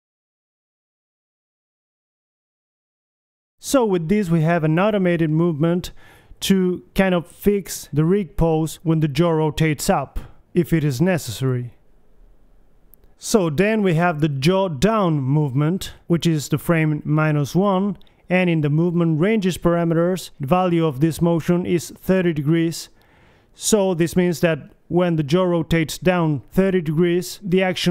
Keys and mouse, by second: 0.0 middle click, 0.2 middle click, 0.4 right click, 0.7 g, 2.3 KP_3, 3.1 Left, 4.2 Right, 4.8-6.6 drag, 5.9 alt+r, 9.8-11.1 drag, 9.8 KP_3, 11.5-12.6 drag, 12.6-13.8 middle drag, 13.8-15.1 drag, 15.1 middle click, 15.7 Left, 16.0 Right, 17.6-19.8 middle drag, 19.8 r, 23.5-24.9 middle drag, 24.9 KP_3, 25.6 Left, 26.5 Right, 26.8 Left, 27.6 Left.